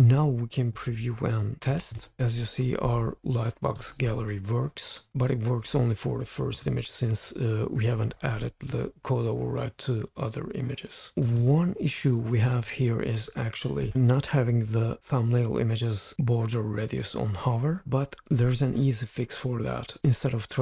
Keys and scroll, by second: 2.0 super+p.